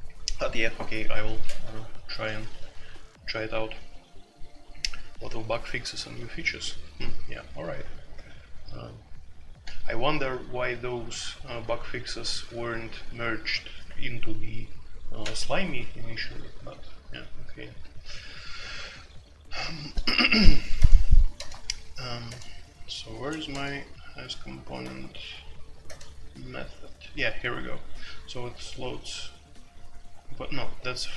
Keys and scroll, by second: 2.1-2.7 typing, 7.8-8.4 typing, 16.2-18.2 typing, 20.5-22.3 typing, 23.5 typing, 24.8 typing, 25.8 typing, 27.7 typing, 30.7-31.1 typing.